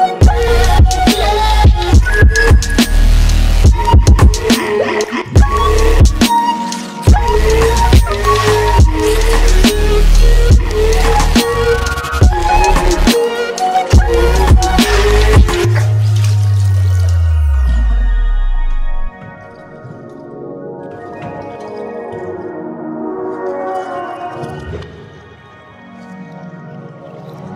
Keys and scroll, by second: 3.1 ctrl+x, 6.3 ctrl+x, 22.9 ctrl+z.